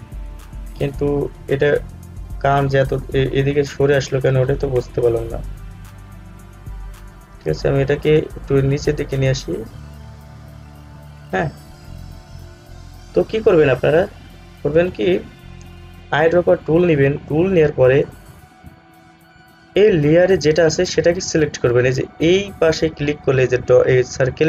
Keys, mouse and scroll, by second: 3.0 click, 5.0 ctrl+z, 8.9 Down, 11.6 scroll down 1, 17.0 click, 18.2 scroll up 1.